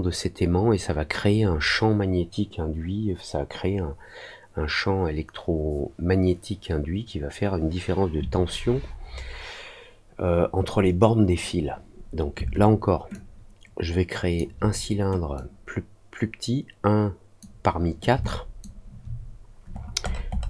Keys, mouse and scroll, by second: 13.1-14.3 ctrl+drag, 15.3-17.3 drag, 18.2 alt+click, 19.7 middle click, 20.0 middle click, 20.3 middle click.